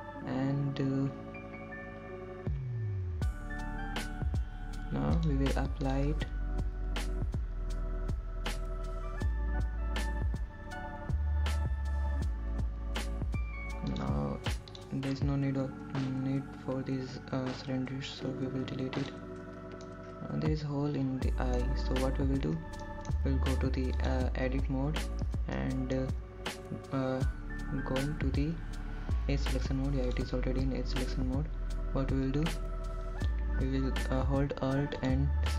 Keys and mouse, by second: 8.3-15.3 drag, 17.8 shift+click, 21.5 x, 22.9-24.6 middle drag, 25.9 middle click, 27.0 click, 27.6 Tab, 28.6 middle click, 33.1 click.